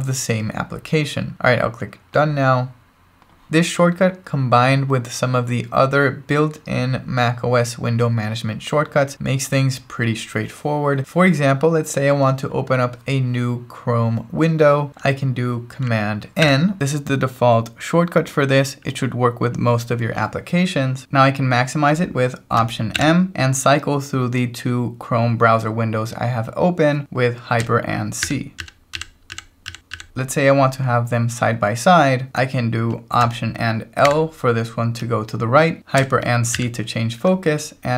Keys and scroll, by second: 16.4 super+n, 21.0 Return, 22.9 alt+m, 28.2 ctrl+alt+shift+super+c, 34.0 alt+l, 36.5 ctrl+alt+shift+super+c.